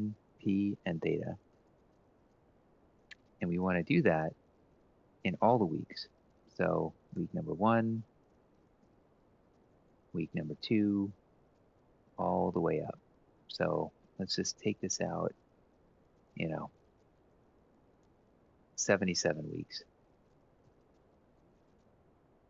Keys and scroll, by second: 0.3-1.7 typing, 3.1-3.8 typing, 4.2 Down, 6.6-10.0 typing, 7.6 Right, 11.8 ctrl+c, 11.8-12.7 shift+Right, 12.3 typing, 12.9 shift+Right, 13.7 shift+Right, 14.3 shift+Right, 14.8 ctrl+v, 15.0 Right, 16.2 ctrl+c, 16.5 shift+Right, 16.7 shift+Right, 16.9 shift+Right, 17.1 shift+Right, 17.2 shift+Right, 17.5 ctrl+v, 18.5 Right, 19.1 ctrl+Right, 19.4 Delete, 19.9 Left, 20.6 Left, 21.0 Left, 21.2 Left, 21.5 Left.